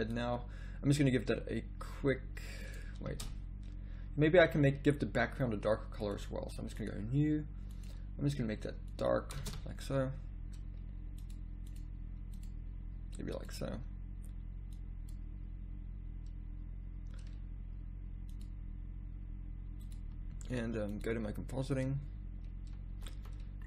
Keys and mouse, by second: 2.6 click, 3.4 shift+z, 4.3 z, 4.5 z, 9.6 shift+z, 21.0 click, 23.1 z, 23.2 z.